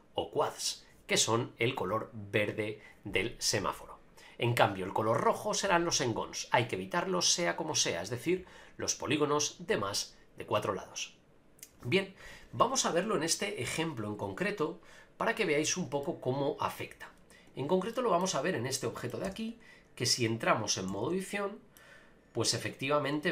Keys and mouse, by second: 16.0 middle click, 17.9-18.2 shift+middle drag, 18.7 middle click, 19.2 Tab, 20.1 middle click, 20.9 a, 21.0 a, 21.3 middle click.